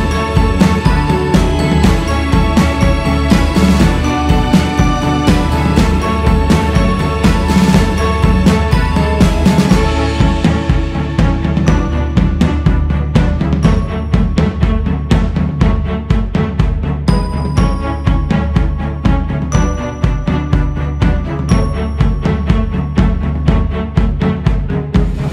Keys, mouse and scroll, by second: 0.6-1.3 scroll up 2, 1.3 q, 2.6-7.7 drag, 7.7 shift+s, 7.8 f, 9.1-11.9 drag, 11.9 shift+c, 12.2-13.0 scroll up 2, 13.0-15.7 drag, 15.7-17.9 scroll down 2, 17.9 click, 18.5-19.3 scroll up 2, 19.5-21.2 drag, 21.2-21.9 scroll down 7, 22.9-23.5 scroll up 5, 23.5-24.3 scroll down 1, 24.3 q, 24.8-25.3 scroll up 3.